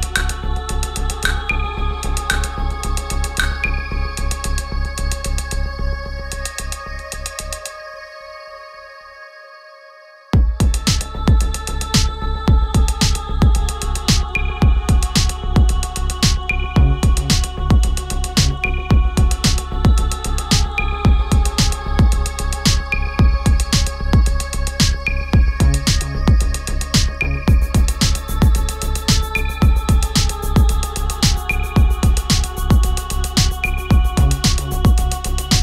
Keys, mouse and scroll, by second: 1.5-5.4 drag, 8.3 click, 12.2-13.5 drag, 13.5 Return, 14.8 click, 16.5 shift+Up, 20.0 click, 21.7-26.0 drag, 28.9 click, 31.2-33.9 drag, 33.9 Return, 35.4 click.